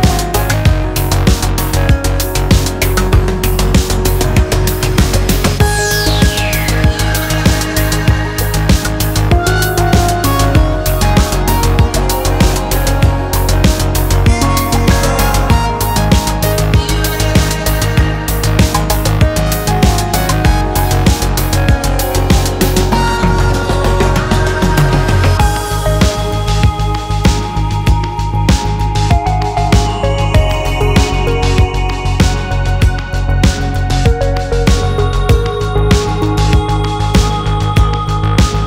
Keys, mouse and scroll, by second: 2.3-4.7 middle drag, 5.7-7.5 drag, 10.3 click, 11.3-12.6 middle drag, 13.9-15.3 drag, 15.8-20.6 drag, 20.9-21.4 middle drag, 22.7-24.4 drag, 25.3-30.4 drag, 30.8 click, 31.5-32.8 middle drag, 33.1-33.4 scroll down 1, 33.4-36.4 middle drag, 37.3 click, 37.6 click, 38.3 click.